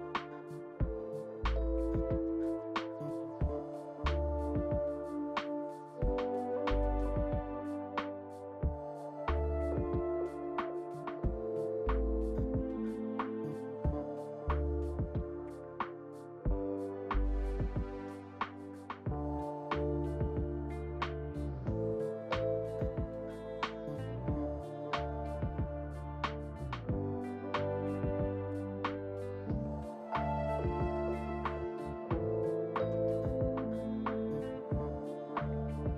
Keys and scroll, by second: 32.9 3.